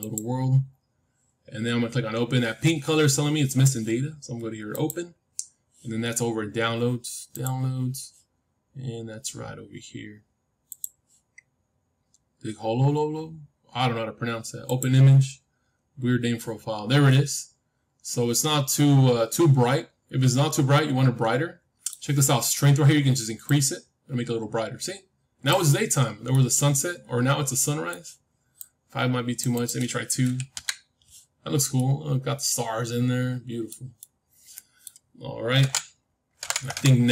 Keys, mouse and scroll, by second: 4.6-6.6 drag, 16.6 middle click, 16.7-17.0 scroll up 1, 17.0-20.3 middle drag, 23.4-25.4 drag, 25.6-28.2 middle drag, 28.5-31.5 drag, 31.5-33.7 middle drag, 33.9-36.4 middle drag.